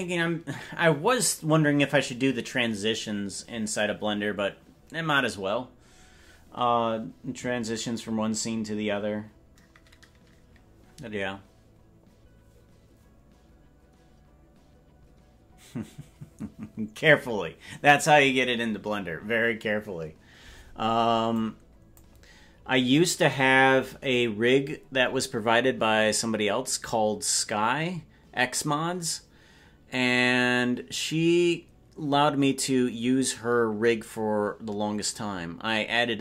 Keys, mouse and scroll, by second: 21.4 click, 23.3 right click.